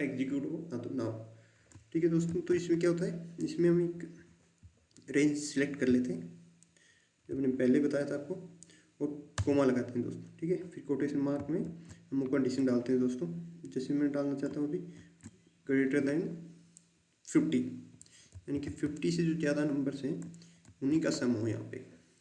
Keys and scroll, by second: 2.2 shift+9, 9.3 ', 11.6 shift+', 14.9 shift+., 18.3 typing, 20.6 shift+'.